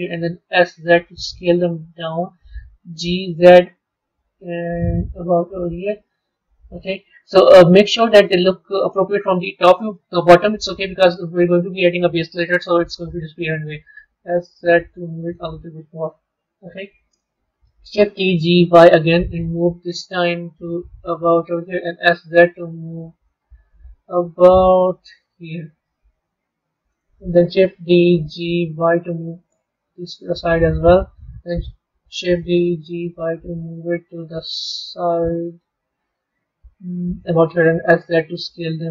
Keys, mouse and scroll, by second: 0.4 s, 2.8 g, 6.1-9.2 middle drag, 13.7 s, 16.1 KP_3, 17.8 shift+d, 21.8 s, 23.7 g, 27.8 shift+d, 32.3 shift+d, 37.6 s.